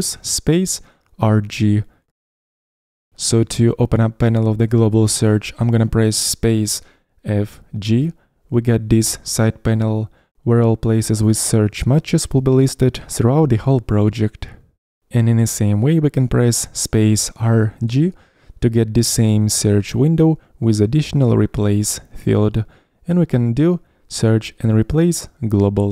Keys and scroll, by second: 7.3 space, 7.4 f, 7.8 g, 18.5 space, 18.6 r, 19.1 g.